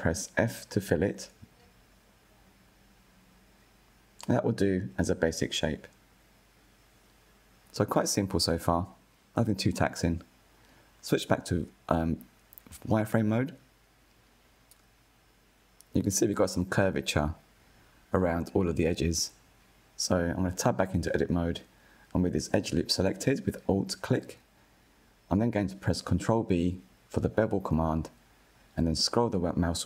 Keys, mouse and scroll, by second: 0.1 f, 1.2 click, 1.7-3.9 middle drag, 3.9 KP_1, 5.7 Tab, 6.7 scroll up 1, 10.0 click, 11.2 click, 11.6-12.2 shift+middle drag, 12.2 scroll up 2, 15.3-15.9 shift+middle drag, 15.9 scroll up 5, 18.0 scroll down 1, 19.5 alt+click, 20.2 scroll down 5, 20.7-22.6 shift+middle drag, 22.6 KP_1, 23.3-24.0 shift+middle drag, 24.0-24.4 scroll up 5, 24.4-26.0 shift+middle drag, 26.0 ctrl+b.